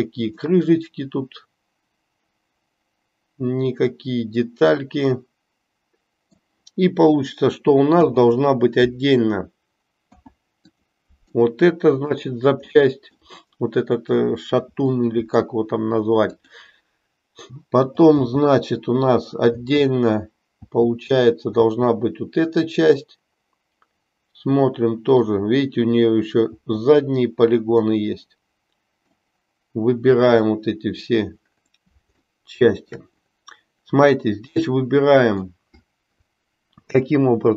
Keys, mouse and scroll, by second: 0.5-6.3 middle drag, 7.9 p, 11.4 middle click, 12.9 middle click, 14.9 middle click, 18.1 l, 22.9-25.4 middle drag, 26.5 l, 27.7-29.3 middle drag, 30.3 l, 32.4 shift+middle click, 34.6 middle click.